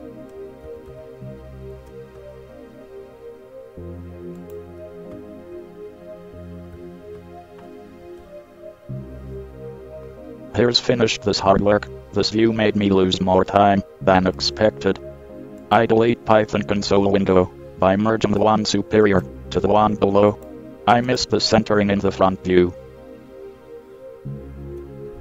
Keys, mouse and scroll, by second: 0.8 ctrl+c, 1.1 ctrl+c, 2.0 ctrl+c, 4.6-5.5 drag, 7.0 ctrl+v, 8.4 KP_1, 11.7 middle drag, 12.4 middle click, 14.5-16.6 right drag, 19.4 right click, 23.8-25.1 middle drag.